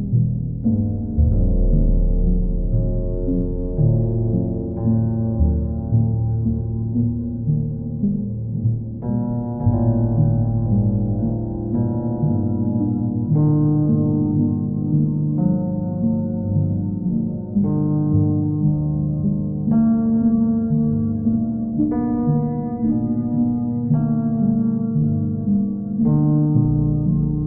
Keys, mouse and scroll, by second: 1.6-2.6 drag, 4.5-5.6 drag, 6.6 click, 8.1 click, 8.4 ctrl+z, 10.6-11.7 drag, 12.4-13.5 drag, 13.8-14.8 right drag, 14.9-16.1 drag, 18.5-19.6 drag, 20.5-21.6 drag, 24.4-25.5 drag, 26.6-27.4 drag.